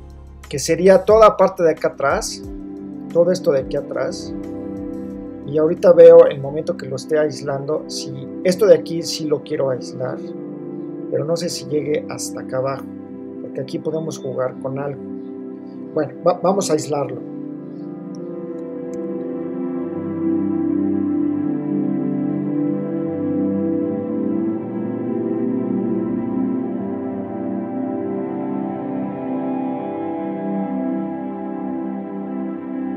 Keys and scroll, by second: 18.5 super+l, 20.1 super++, 20.5 space, 23.1 space, 24.6 space, 27.1 space, 28.2 space, 29.0 super+-.